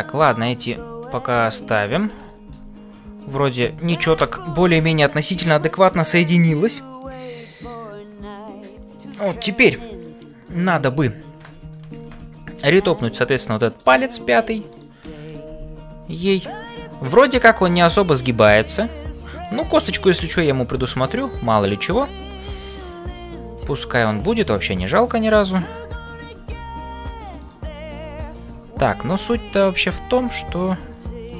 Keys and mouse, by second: 0.0-31.3 typing, 2.2 shift+middle click, 4.0 ctrl+s, 12.7-13.9 middle drag, 14.1 shift+middle click, 14.7 click, 15.3-16.3 middle drag, 17.4-19.2 middle drag, 20.9-22.1 middle drag, 22.9 middle click, 24.3 shift+middle click, 25.0 click, 25.4 middle click, 27.9 middle click.